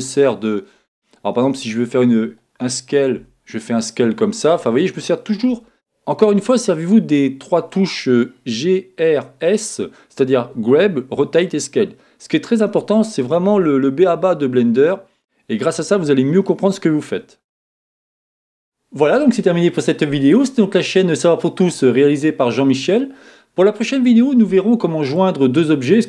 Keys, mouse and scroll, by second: 0.1-1.6 middle drag, 1.6 click, 3.2 s, 5.7-26.0 middle drag, 12.6-13.0 scroll up 2, 13.0-13.5 scroll down 2, 13.5 scroll down 1.